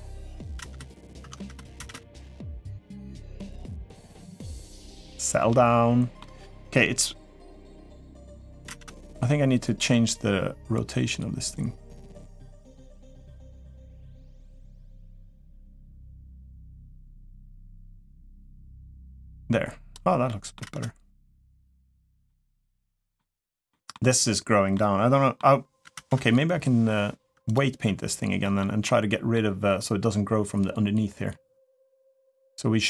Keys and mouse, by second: 0.0 click, 0.0 0, 0.3 space, 1.0 Tab, 1.5 space, 4.9-6.0 middle drag, 6.3-7.4 middle drag, 7.8 middle click, 8.4 space, 14.5-16.2 drag, 16.7-19.8 drag, 20.0 middle drag, 20.4 space, 22.0-22.9 middle drag, 23.5 middle click, 24.5-25.2 middle drag, 25.7 space, 27.5 Tab, 28.2 middle click, 28.6 middle click.